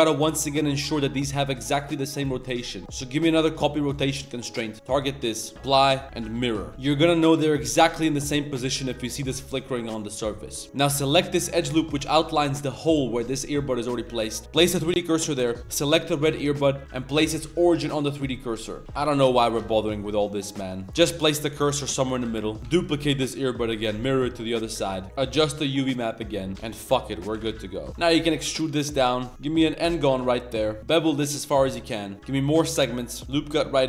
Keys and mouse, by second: 1.2 middle click, 2.8-3.7 drag, 4.5 click, 5.5 ctrl+a, 5.9 Tab, 6.7-8.4 middle drag, 8.5 shift+middle drag, 8.9 middle click, 9.6-10.5 middle drag, 10.6 z, 11.3 alt+click, 11.7 alt+click, 12.1 alt+click, 13.5 middle click, 14.2 middle drag, 14.4 shift+s, 15.2 z, 15.4 Tab, 15.7 click, 17.5 ctrl+alt+shift+c, 18.0 shift+click, 18.3-18.8 drag, 18.8 Tab, 18.8-21.0 typing, 19.9 drag, 20.5 click, 20.6 Tab, 20.7 click, 20.7 middle click, 21.0 ctrl+z, 21.5 click, 21.9 click, 22.2-23.0 typing, 22.6 Tab, 24.9 ctrl+z, 26.5 g, 27.5 g, 28.0 ctrl+s, 28.0 e, 28.0 g, 30.8 ctrl+z, 30.8 ctrl+b, 32.1-33.2 drag.